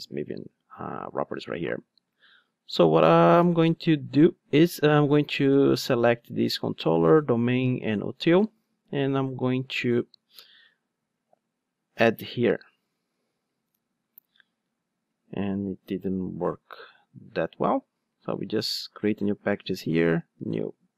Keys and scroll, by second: 8.0 super+c, 8.5 ctrl+Tab, 19.7 super+n.